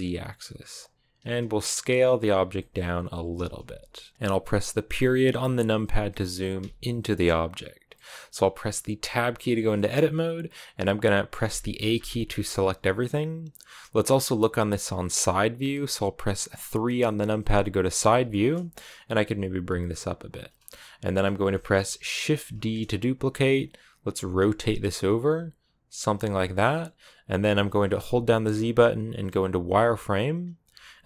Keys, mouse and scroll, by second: 1.0 s, 2.2 g, 4.1-5.9 middle drag, 5.9 KP_Decimal, 6.8 middle click, 7.2-7.7 scroll down 2, 7.7-8.8 middle drag, 8.8 Tab, 9.6-11.3 middle drag, 11.3 a, 11.8 a, 17.1 KP_3, 18.1 shift+middle click, 19.0 g, 20.3-20.9 scroll down 2, 20.9-21.3 scroll up 1, 21.3 shift+middle click, 22.2 shift+d, 24.0-27.4 typing, 29.6 z.